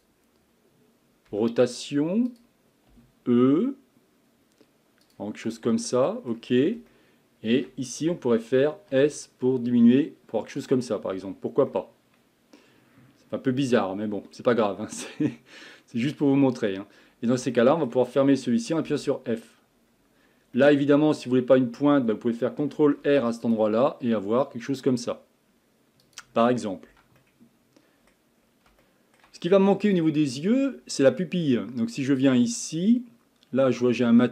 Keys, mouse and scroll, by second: 1.3 r, 3.2 e, 5.6-6.6 middle drag, 6.6-6.9 scroll up 1, 6.9 shift+middle click, 7.7-8.9 scroll down 1, 8.9 s, 11.1 Tab, 11.7-14.7 middle drag, 16.3 Tab, 16.7-17.5 scroll up 2, 17.5-19.3 shift+middle drag, 19.3 f, 19.8-20.2 scroll down 1, 20.2-20.6 scroll up 2, 20.6-21.8 middle drag, 21.8-23.0 scroll down 1, 23.0 ctrl+r, 26.4-26.9 scroll down 4, 26.9 Tab, 27.2-28.4 middle drag, 28.4-28.8 scroll up 2, 28.8-29.4 shift+middle drag, 29.4 scroll up 4, 29.9 click, 30.3-32.3 shift+middle drag, 32.3 click, 33.9-34.3 scroll up 10.